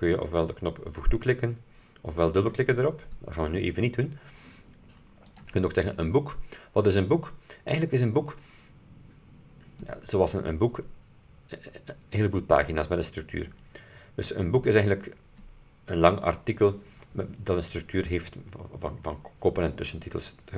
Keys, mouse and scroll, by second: 5.4 click, 12.5 click, 14.6 click.